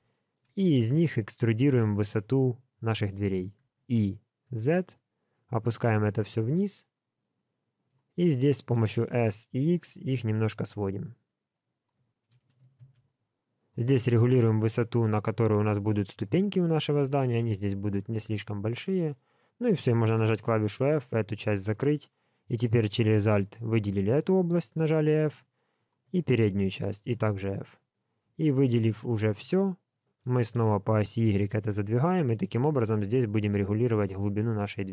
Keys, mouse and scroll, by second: 0.1 shift+middle click, 1.2 alt+z, 3.6 e, 15.0 middle click, 17.5 middle click, 18.9 middle click, 19.3-20.0 scroll up 1, 20.0-20.6 scroll up 1, 20.0 f, 20.8 middle click, 22.4 alt+click, 23.0 middle click, 24.8 f, 25.7 alt+click, 26.1 middle click, 27.1 f, 27.5 middle click, 29.3 l, 30.0 middle click, 30.5 g, 34.2 scroll down 5, 34.6 middle click.